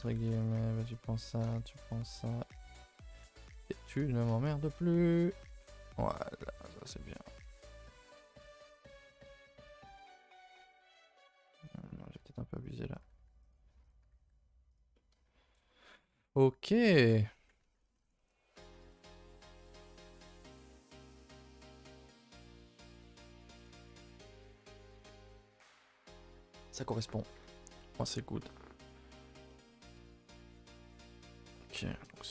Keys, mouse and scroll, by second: 0.2 2, 0.5 click, 0.8 shift+click, 1.0 f, 1.8 shift+click, 2.2 click, 2.7 shift+click, 2.9-4.4 typing, 3.8 click, 4.2 shift+click, 5.5 click, 5.6 g, 6.7 click, 6.8 g, 8.1 click, 8.2 g, 8.9 Tab, 9.1 scroll down 2, 9.5 a, 9.6 a, 9.8 middle click, 10.3 Tab, 10.6 middle click, 10.9 a, 11.0 a, 11.2 middle click, 11.7 click, 12.1 g, 13.0 click, 13.0 g, 13.9 click, 14.0 g, 14.9-16.8 middle drag, 16.8 click, 17.1 a, 17.3 a, 17.8 middle drag, 18.0 Tab, 18.3 a, 18.4 a, 18.5-18.9 middle drag, 18.9 ctrl+s, 19.1-19.7 middle drag, 19.7-20.1 scroll up 2, 20.1-22.5 shift+middle drag, 22.5 scroll down 2, 22.8-23.3 shift+middle drag, 23.3 scroll up 1, 23.4 middle drag, 23.7 a, 23.8 a, 24.0-26.7 scroll down 2, 26.9 a, 27.0 a, 27.1-27.6 scroll down 2, 27.6-29.1 middle drag, 29.1-29.5 scroll down 1, 29.5-29.9 middle drag, 29.9 KP_0, 30.4 a, 30.5 a, 30.8-31.4 scroll down 3, 31.4-32.3 shift+middle drag.